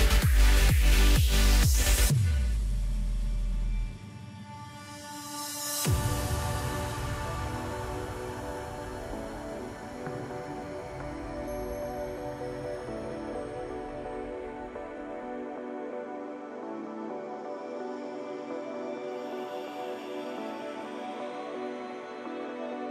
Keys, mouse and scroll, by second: 1.5 Tab, 2.4 g, 6.1 Tab, 6.5-7.5 scroll down 1, 7.5 KP_Divide, 8.8 s, 11.3 r, 13.7 g, 16.5 s, 18.1 g, 19.8 g, 22.0-22.9 middle drag.